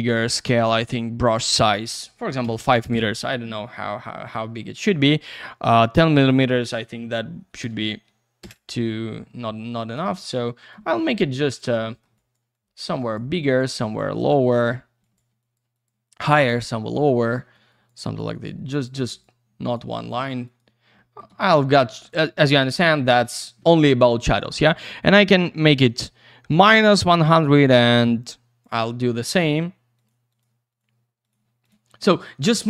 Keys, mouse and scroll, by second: 1.2 click, 1.3 click, 1.4 double click, 2.3 typing, 2.9 Return, 4.4 middle click, 6.0 click, 7.4 typing, 8.4 Return, 9.7 click, 10.1 alt+middle click, 10.9 middle click, 11.4 click, 11.8 middle click, 12.0 double middle click, 12.1 click, 12.5 click, 13.4 click, 13.5 double click, 13.8 click, 14.1 click, 14.3 double click, 14.4 click, 15.0 alt+click, 15.7 click, 15.8 double click, 16.0 click, 16.3 click, 16.4 double click, 17.3 middle click, 17.7 click, 18.0 click, 18.1 double click, 18.3 click, 18.7 click, 18.8 double click, 19.1 click, 19.6 click, 19.9 click, 20.4 click, 20.6 double click, 21.1 alt+middle click, 21.3 c, 22.0 click, 22.4 click, 22.5 double click, 23.2 ctrl+z, 25.7 click, 29.4 click, 29.9 click, 30.3 click, 30.7 click, 30.8 double click, 31.2 click, 31.7 double click.